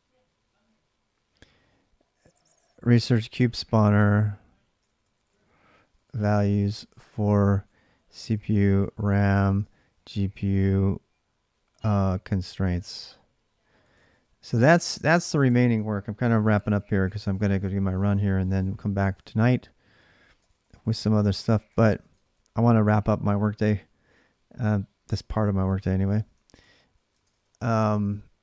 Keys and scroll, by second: 2.6-10.2 typing, 11.6-15.5 typing, 20.1-22.6 typing, 25.5 ctrl+[, 25.6-27.4 typing, 26.9 ctrl+[, 27.8 alt+Tab.